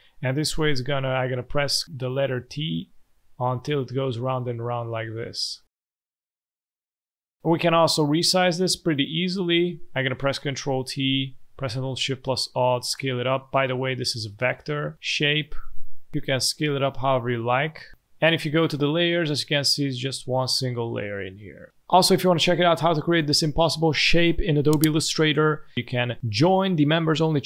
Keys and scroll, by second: 0.1 ctrl+alt+shift+t, 0.4 ctrl+alt+shift+t, 0.6 ctrl+alt+shift+t, 1.5 ctrl+alt+shift+t, 1.8 ctrl+alt+shift+t, 2.2 ctrl+alt+shift+t, 2.4 ctrl+alt+shift+t, 2.8 ctrl+alt+shift+t, 3.0 ctrl+alt+shift+t, 3.2 ctrl+alt+shift+t, 3.4 ctrl+alt+shift+t, 3.7 ctrl+alt+shift+t, 3.9 ctrl+alt+shift+t, 4.1 ctrl+alt+shift+t, 4.3 ctrl+alt+shift+t, 4.6 ctrl+alt+shift+t, 4.8 ctrl+alt+shift+t, 4.9 ctrl+alt+shift+t, 5.1 ctrl+alt+shift+t, 5.3 ctrl+alt+shift+t, 5.5 ctrl+alt+shift+t, 6.1 ctrl+alt+shift+t, 6.4 ctrl+alt+shift+t, 7.3 ctrl+alt+shift+t, 10.6 ctrl+t.